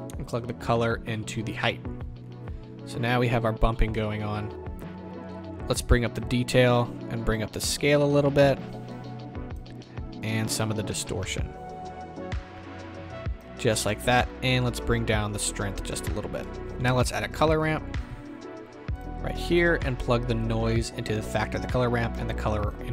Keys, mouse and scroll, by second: 1.5-22.9 drag.